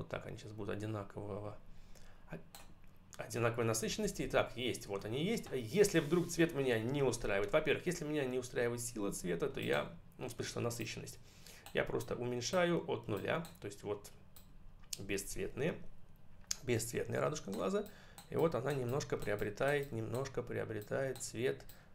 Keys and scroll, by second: 3.9 ctrl+-.